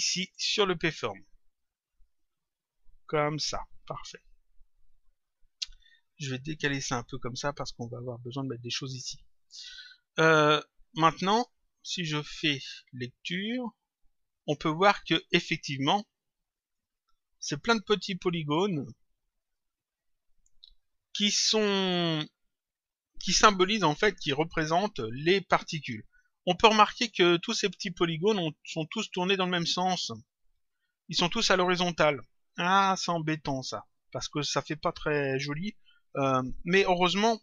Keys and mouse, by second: 1.9 click, 4.0 click, 5.2 click, 6.4 click, 9.4 click, 11.1 click, 12.5 click, 15.4 click, 16.6 click, 19.3 click, 28.7 click, 32.8 click.